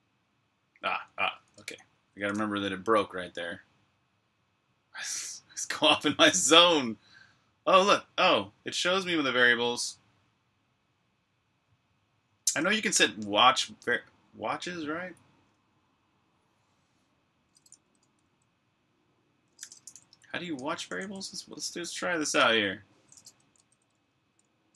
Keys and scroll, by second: 1.5 super+Tab, 19.3-20.4 typing, 20.4 Return, 23.5-24.6 typing.